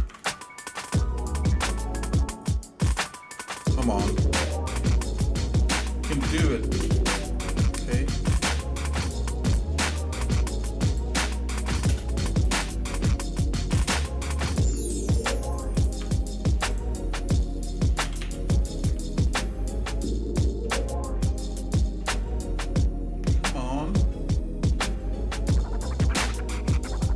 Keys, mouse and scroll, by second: 4.1 k, 8.2 k, 12.4 click, 13.7 g, 15.7 ctrl+click, 16.7 click, 18.0 g.